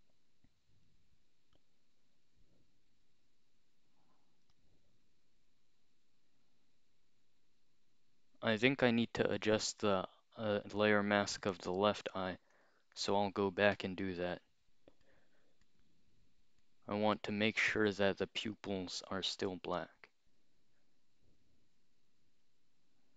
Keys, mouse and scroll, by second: 12.6 click, 14.5 x, 15.1 click, 15.7 click, 16.6 click, 17.5 click, 18.3 click.